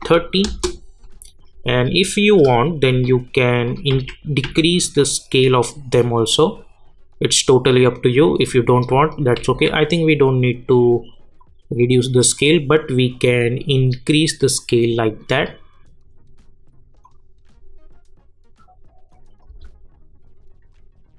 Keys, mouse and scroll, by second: 0.5 Return, 2.2 click, 3.6 shift+click, 3.9 s, 4.4 s, 5.0-8.7 drag, 8.9 ctrl+Num_Lock, 8.9 click, 9.4 ctrl+z, 11.4-14.8 drag, 17.0 click, 19.5 space.